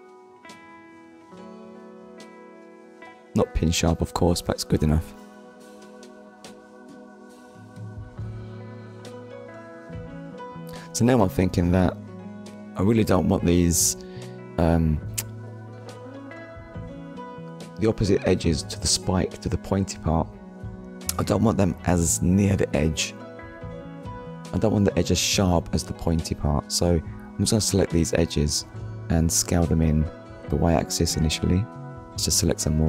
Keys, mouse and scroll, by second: 0.3 click, 0.7 scroll down 1, 1.4 middle click, 4.2-4.6 scroll up 1, 4.7 Tab, 5.2 middle click, 6.0 scroll up 1, 6.6 shift+middle click, 6.9 middle click, 9.6 middle click, 11.5 click, 12.9 click, 13.7 click, 14.7 shift+click, 15.3 middle click, 18.7 shift+click, 19.8 shift+click, 20.2 middle click, 21.2-21.6 scroll up 1, 22.2 middle click, 23.8 shift+middle click, 24.6 middle click, 29.5 right click, 30.7 shift+click.